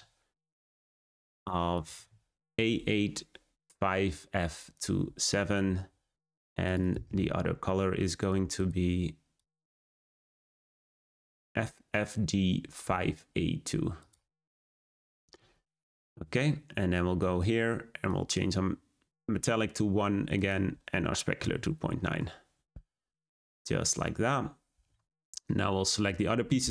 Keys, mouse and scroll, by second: 9.3-10.2 drag, 14.3 click, 18.2-25.6 drag, 25.6 scroll up 1.